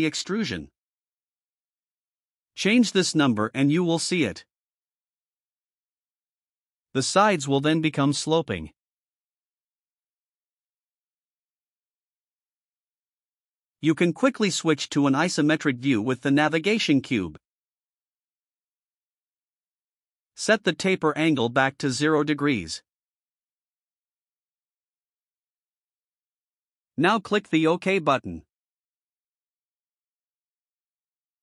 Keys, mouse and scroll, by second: 0.9 click, 1.1 click, 1.3 click, 1.5 click, 1.7 click, 1.8 click, 2.0 click, 2.2 click, 2.4 click, 2.6 click, 2.7 click, 2.9 click, 3.1 click, 3.3 click, 3.4 click, 3.6 click, 3.8 click, 4.0 click, 4.1 click, 4.3 click, 4.5 click, 4.7 click, 4.9 click, 5.1 click, 5.4 click, 6.4-9.7 drag, 9.2 right click, 13.5 click, 15.6 click, 19.1 click, 21.0 0, 22.8 click, 30.3 click.